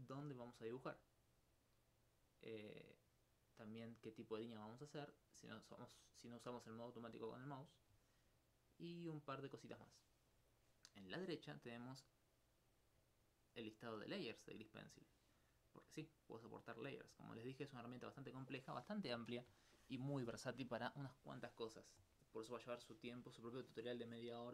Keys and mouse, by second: 11.1 middle click, 12.3-13.3 middle drag, 13.3 click, 18.4 click.